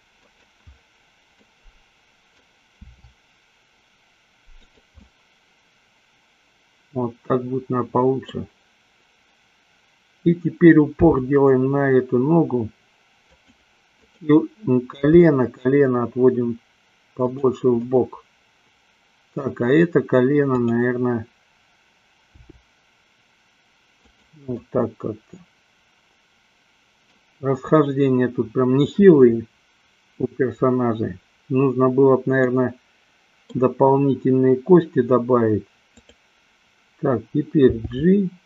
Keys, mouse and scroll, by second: 0.6 click, 2.0 middle click, 3.0 r, 5.2-8.6 middle drag, 11.2 g, 13.6 click, 14.1-15.2 drag, 15.6 g, 17.6 click, 17.9-19.9 middle drag, 20.7-22.0 drag, 22.6 g, 24.6-27.4 middle drag, 32.5-33.7 middle drag, 36.0-37.0 drag, 38.0 g.